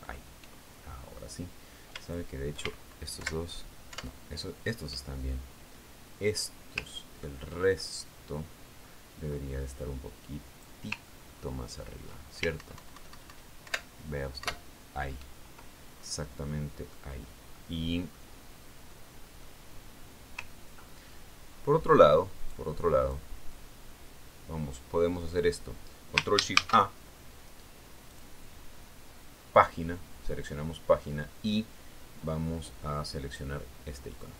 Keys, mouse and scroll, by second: 0.6 alt+Left, 0.9 alt+Up, 2.4 alt+scroll up 3, 3.5 shift+click, 4.7 alt+Down, 5.4 alt+Up, 8.5-9.0 ctrl+scroll down 2, 9.1-10.8 ctrl+drag, 11.2-12.4 drag, 12.5-13.1 ctrl+scroll up 2, 13.1-13.9 ctrl+scroll up 1, 13.9-15.7 ctrl+alt+scroll up 2, 14.1 alt+Up, 15.7-16.4 alt+scroll up 1, 15.9 alt+Up, 18.0 click, 19.2 click, 20.0 middle click, 20.3 click, 21.0 middle click, 22.0-22.8 ctrl+scroll down 2, 23.9 click, 24.5 click, 25.0-27.1 drag, 28.0 ctrl+shift+a, 29.6 click, 31.0 click.